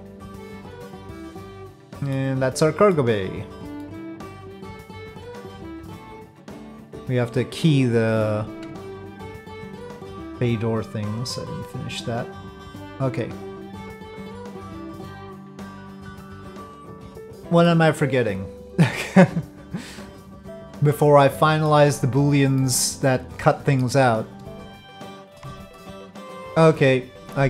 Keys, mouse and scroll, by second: 0.6 middle click, 1.7 middle click, 2.6 middle click, 3.8 middle click, 4.2 click, 6.5 click, 7.9 click, 8.8 ctrl+click, 11.4-12.7 drag, 13.3-15.7 drag, 17.2 click, 17.4 middle click, 19.0-20.2 middle drag, 21.3-21.7 middle drag, 22.6-23.8 middle drag, 24.9 middle click, 25.9-26.2 shift+middle drag.